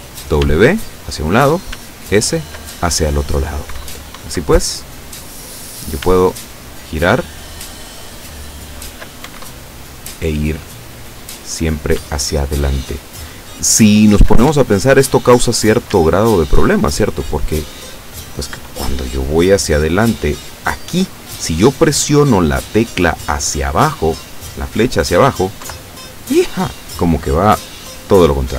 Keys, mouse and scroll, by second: 0.5 w, 1.8 s, 4.3 Up, 6.1 s, 9.4 Up, 12.0 s, 14.6 Up, 16.0 w, 25.8 Down.